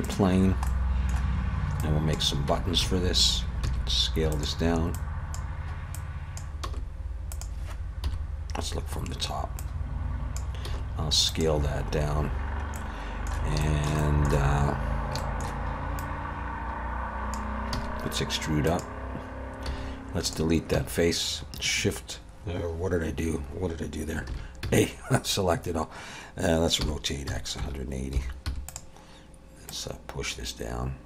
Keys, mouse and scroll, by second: 0.4-1.0 scroll down 3, 0.7 middle click, 1.8 click, 2.5 Tab, 2.8 a, 3.6 s, 4.9 click, 5.9 click, 6.6 s, 8.1 KP_7, 8.8-9.6 scroll up 3, 9.6 click, 10.7 s, 12.5 scroll up 2, 12.8 middle click, 13.6 shift+middle click, 14.0 middle click, 15.2 shift+middle click, 16.0 click, 17.7 e, 19.7 x, 20.8 a, 24.3 alt+a, 26.8 r, 29.7 click.